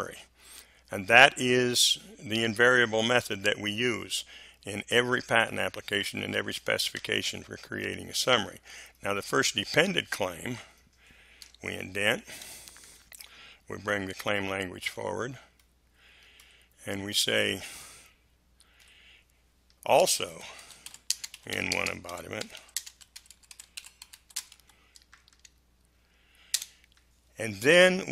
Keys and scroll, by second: 12.3 Tab, 13.8 Delete, 18.7 Delete, 19.9-24.9 typing, 26.5 space.